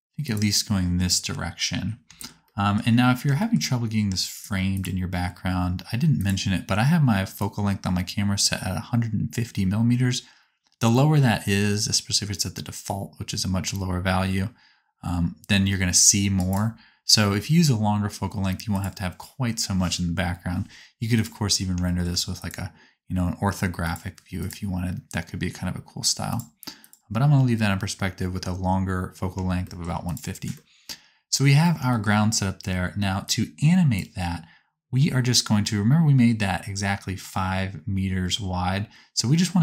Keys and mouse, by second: 4.4 right click, 4.7 middle click, 5.3-10.4 right drag, 7.4-13.6 drag, 7.4-10.4 middle drag, 16.5 ctrl+click, 20.3 middle click, 21.2 click, 21.4 shift+middle click, 22.4-30.1 drag, 30.3-33.2 middle drag, 33.2-39.6 drag.